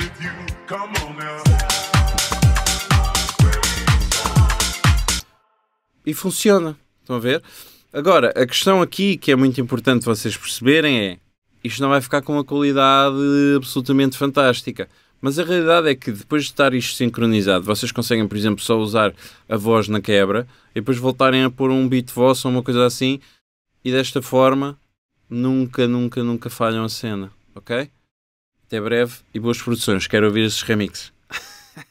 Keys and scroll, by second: 0.9 alt+BackSpace, 5.2 space.